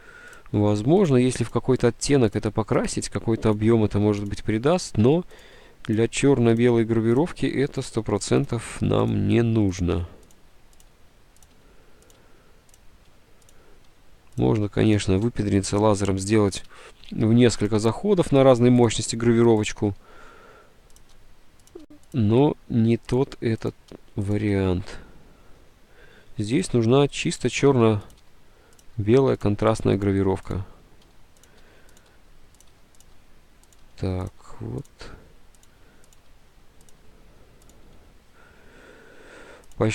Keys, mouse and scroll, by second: 0.7 Delete, 1.3 Delete, 1.8 Delete, 2.6 Delete, 4.0 Delete, 4.4 Delete, 5.0 Delete, 5.7 Delete, 6.3 Delete, 7.4 Delete, 8.0 Delete, 9.3 Delete, 9.5 Delete, 9.9 Delete, 11.7 Delete, 12.9 Delete, 13.2 Delete, 14.2 Delete, 15.2 Delete, 15.3 Delete, 15.4 Delete, 16.3 Delete, 16.8 Delete, 18.1 Delete, 19.0 Delete, 19.1 Delete, 19.6 Delete, 20.0 Delete, 21.4 Delete, 22.1 Delete, 22.5 Delete, 24.0 Delete, 25.6 Delete, 26.9 Delete, 27.7 Delete, 28.3 Delete, 29.0 Delete, 29.7 Delete, 31.2 Delete, 31.6 Delete, 32.1 Delete, 32.8 Delete, 34.9 Delete, 35.0 Delete, 36.3 Delete, 38.1 Delete.